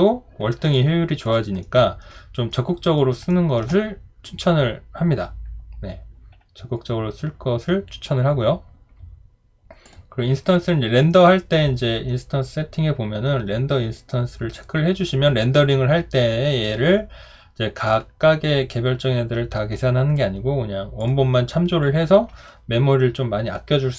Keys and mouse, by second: 0.7 alt+click, 1.6 alt+middle click, 2.5 alt+right click, 3.3 alt+middle click.